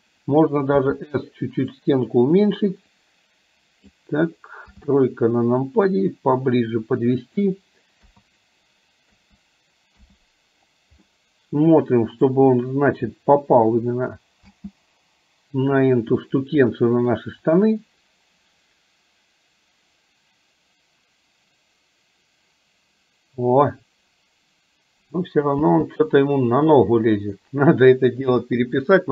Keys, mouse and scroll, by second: 1.0 s, 3.1-4.1 drag, 4.8 KP_3, 6.0-7.5 drag, 8.1 KP_3, 9.1 KP_3, 10.1 KP_1, 11.1-12.3 middle drag, 14.8 space, 16.5-17.4 middle drag, 25.9 space, 26.3-27.6 middle drag, 29.0-29.1 middle drag.